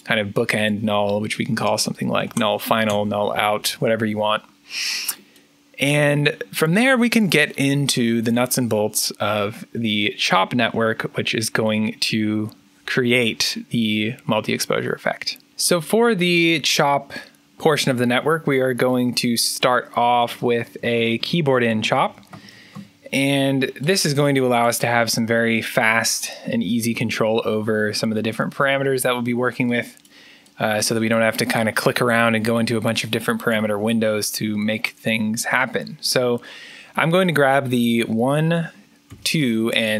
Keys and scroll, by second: 1.4-2.7 typing, 2.8 Return, 20.0 Tab, 20.8 Tab, 21.3-23.1 typing, 39.0 2, 39.8 3.